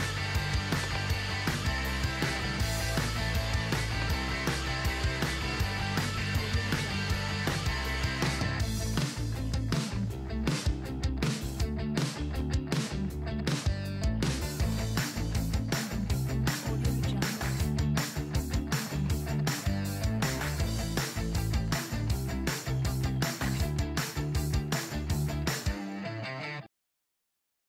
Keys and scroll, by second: 12.5-16.2 typing.